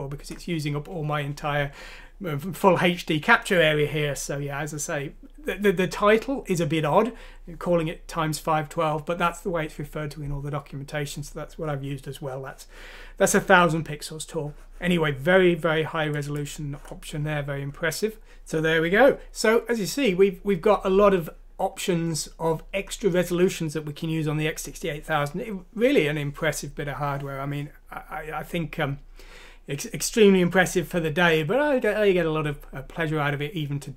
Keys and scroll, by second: 18.2 ctrl+z.